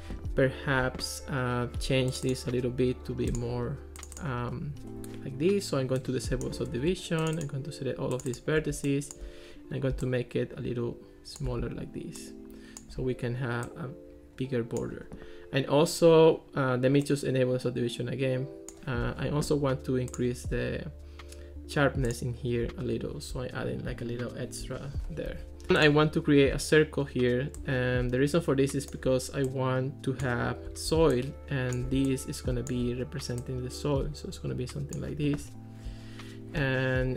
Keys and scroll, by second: 25.3 Escape.